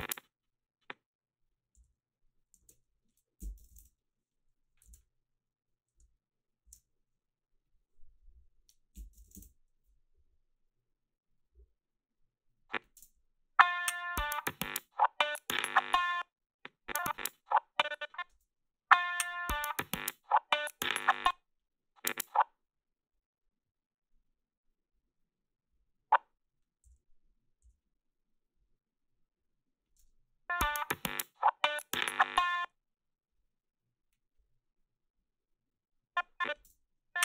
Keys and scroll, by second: 1.8 g, 2.6 alt+shift+s, 3.1-4.2 typing, 6.6 alt+shift+s, 9.0 3, 9.2 0, 9.3 Return, 13.0 space, 16.0 space, 18.3 space, 21.1 space, 26.9 g, 27.6 g, 29.9 space, 32.4 space, 36.7 space.